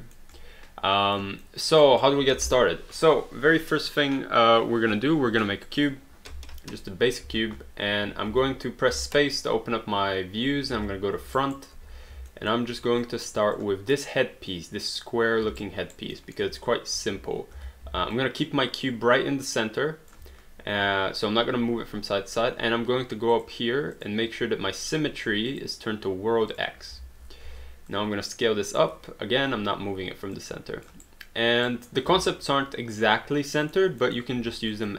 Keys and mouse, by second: 0.0 alt+middle click, 0.4 alt+click, 1.5 alt+middle click, 1.8 alt+right click, 5.8 click, 7.3 space, 8.5 space, 10.8 space, 11.4 alt+right click, 12.0 w, 12.3 alt+middle click, 13.0 click, 15.6 alt+right click, 16.1 alt+middle click, 16.9 r, 17.6 w, 17.9 x, 18.2 click, 20.2 x, 23.3 click, 25.5 click, 27.4 r, 27.9 click, 30.4 click, 31.0 right click, 32.3 alt+middle click, 34.1 alt+middle click, 34.7 click.